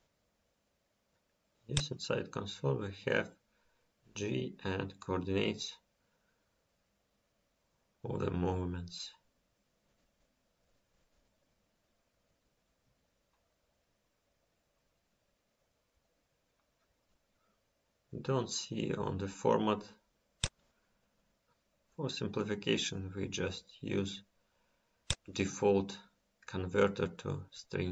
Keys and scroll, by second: 5.4 F5.